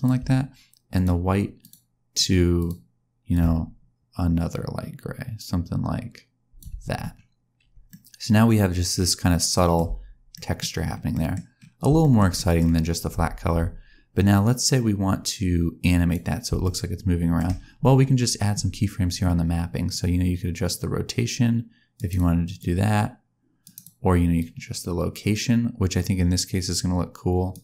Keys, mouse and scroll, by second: 0.9 click, 1.5 click, 2.5 click, 7.8 middle click, 9.8 space, 10.3 middle click, 10.7-11.1 scroll up 2, 11.1 middle click, 11.3 scroll down 1, 12.0 shift+middle click, 12.3 middle click, 13.1 space, 14.3 click, 16.6 shift+middle click, 19.8 click, 22.5 click, 24.3 click.